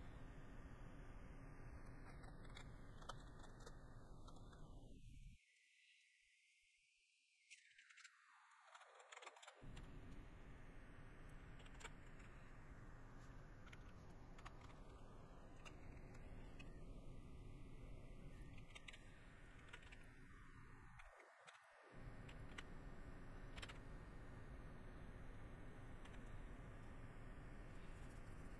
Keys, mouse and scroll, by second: 25.6 middle click, 26.4 middle click.